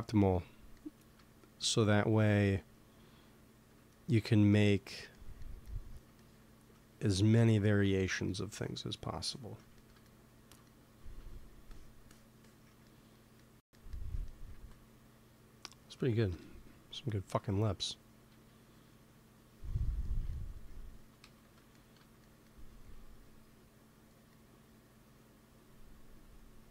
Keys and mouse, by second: 2.4-4.2 drag, 3.8 middle click, 4.6 middle click, 6.8 shift+c, 9.1-11.1 drag, 11.6-14.1 drag, 14.4 ctrl+s, 16.2 KP_1, 18.2 KP_3, 20.9 g, 21.1 f, 22.8 f, 23.5-26.7 drag.